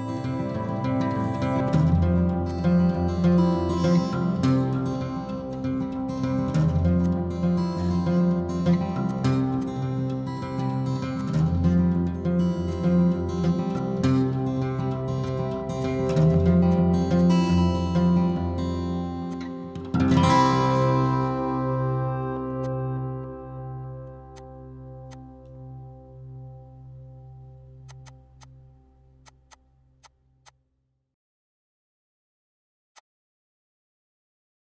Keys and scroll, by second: 9.7-10.6 typing.